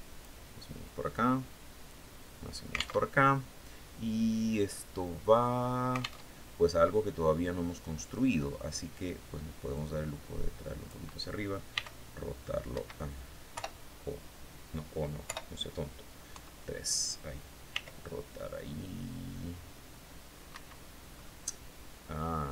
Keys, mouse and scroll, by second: 0.6-2.2 drag, 2.5 alt+Tab, 5.7 alt+Tab, 6.2-7.7 drag, 9.2-10.5 drag, 11.2 r, 12.2 Escape, 13.0 o, 14.7 o, 15.7 KP_3, 17.2 r, 19.9 Escape, 20.6-20.9 scroll up 2, 20.9-22.5 drag.